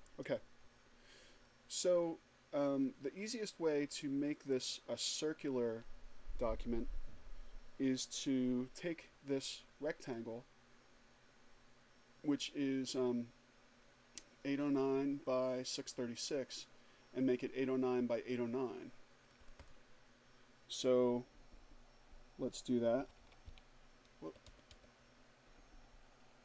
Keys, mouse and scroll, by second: 1.1 click, 1.8-2.3 scroll down 2, 2.6-3.0 scroll down 2, 3.5-4.0 scroll down 2, 10.0 click, 19.1 click, 22.5-23.9 typing.